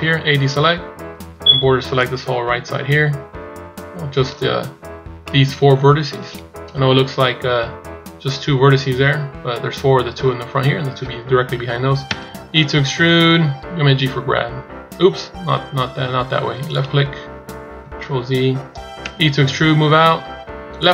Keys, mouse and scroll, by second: 0.0 a, 1.2 b, 5.1 middle click, 6.4 KP_1, 18.8 e.